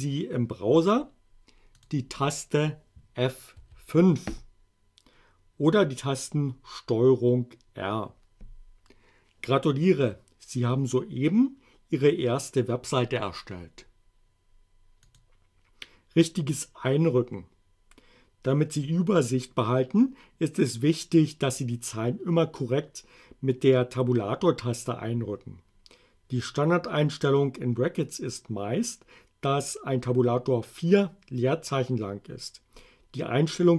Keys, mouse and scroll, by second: 1.9 click, 3.5 F5, 15.2 click.